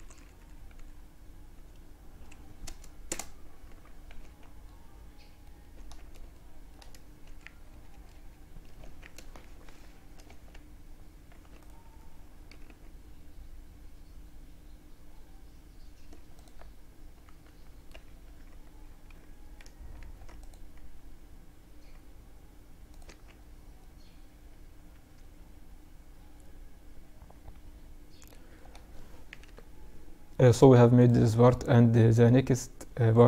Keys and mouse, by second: 2.7 z, 3.2 Tab, 3.6 middle click, 3.8-5.8 middle drag, 4.8 Tab, 6.4 KP_Subtract, 7.8 Tab, 9.3 Tab, 10.6-12.4 drag, 11.5 g, 18.9 ctrl+r, 22.1 Tab, 22.8-24.7 middle drag, 28.4 KP_Divide.